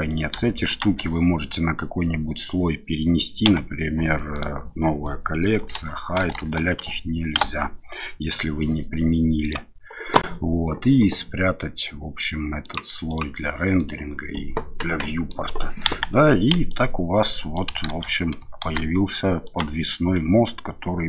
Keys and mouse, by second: 0.1 click, 0.7 shift+click, 3.4 m, 12.6 click, 13.1 click, 13.8-15.3 middle drag, 15.8 KP_1, 16.7 click, 17.9 ctrl+shift+z, 18.6 ctrl+z, 19.4 click, 20.1-21.0 drag.